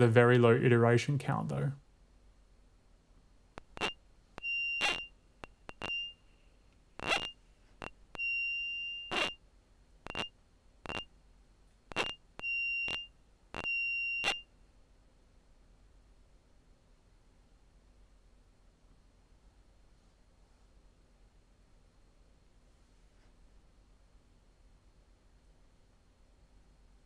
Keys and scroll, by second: 3.3 space, 14.7 space, 15.4 shift+super+r, 16.6 Return, 18.0 Tab, 19.6 typing, 26.4-27.0 typing.